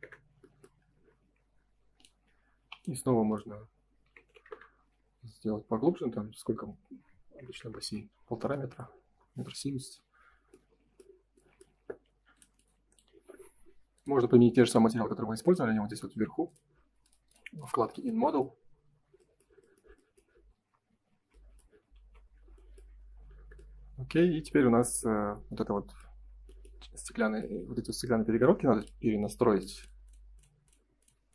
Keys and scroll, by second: 1.0 space, 2.5 p, 4.4 0, 4.4 Return, 7.8 Return, 9.8 space, 10.1 Escape, 11.8 ctrl+s, 20.6 space, 20.8 Escape, 21.9 ctrl+s.